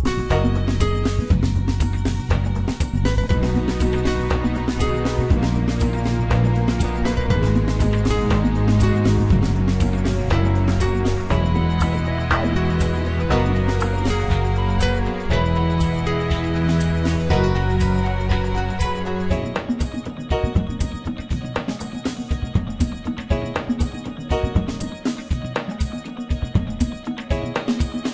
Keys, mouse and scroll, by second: 0.2-6.7 drag, 7.0 click, 7.8 click, 9.1 n, 10.7 click, 12.1-15.1 drag, 15.3-17.5 drag, 17.5 space, 27.1 space.